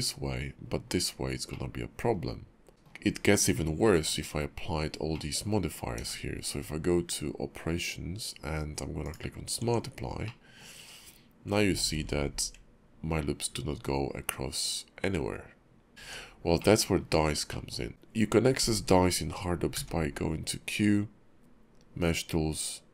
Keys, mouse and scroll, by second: 2.7 Tab, 2.7 middle click, 2.7 scroll down 3, 3.0-4.8 scroll up 1, 5.1 middle click, 5.6 scroll up 1, 5.9 q, 9.6 Tab, 10.2 middle click, 11.9 ctrl+r, 16.0 Tab, 16.6 middle click, 16.9-17.5 scroll up 1, 17.5 middle click, 19.7 q.